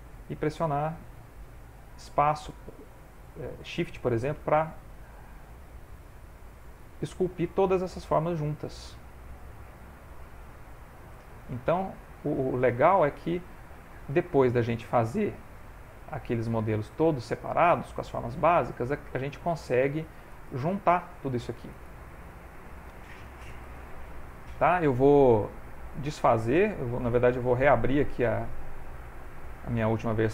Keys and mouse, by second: 0.1 f, 0.4 shift+click, 2.5 shift+click, 3.5 shift+click, 3.7 shift+click, 4.5 shift+click, 5.0 middle click, 5.8 shift+click, 6.2 shift+click, 6.8 shift+click, 7.2 shift+click, 7.7 shift+click, 8.1 shift+click, 8.3 shift+click, 8.7 shift+click, 9.1 middle click, 9.8 shift+click, 10.2 shift+click, 11.2 shift+click, 11.5 shift+click, 12.6 middle click, 13.2 shift+click, 14.2 ctrl+middle click, 14.6 shift+middle click, 15.2 shift+click, 16.7 shift+click, 16.8 shift+click, 17.3 middle click, 18.0 shift+click, 18.6 shift+click, 19.7 f, 20.3 shift+click, 21.3 shift+click, 22.3 shift+click, 22.5 shift+click, 22.6 middle click, 23.5 shift+click, 23.9 shift+click, 24.0 shift+click, 24.2 shift+click, 24.9 ctrl+middle click, 25.2 middle click, 27.3 click.